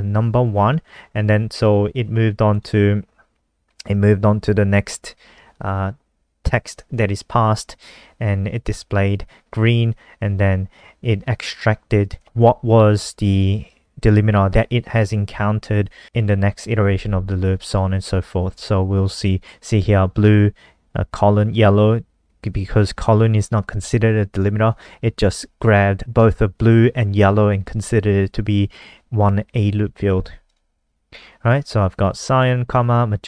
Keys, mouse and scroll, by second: 14.2 click.